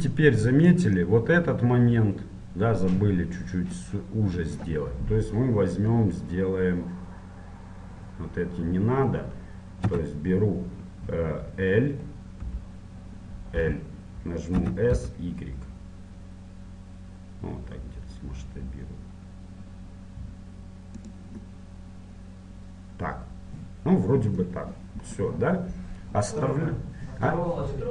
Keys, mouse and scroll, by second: 3.9-6.8 middle drag, 6.8-7.6 scroll up 1, 7.6-10.0 scroll up 1, 10.0 a, 12.6 l, 13.8 l, 14.8 s, 21.6-23.4 middle drag, 24.8-27.9 middle drag.